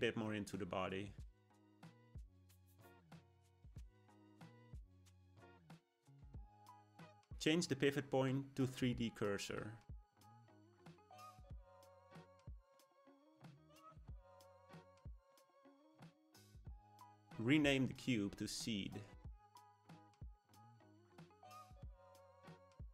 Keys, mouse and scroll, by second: 2.0-3.2 shift+middle drag, 3.2-4.2 scroll down 1, 4.2-7.4 middle drag, 7.4 ., 11.1-13.4 drag, 13.4-16.5 shift+middle drag, 17.9 click, 18.1-19.1 drag, 19.1 e, 21.7 click.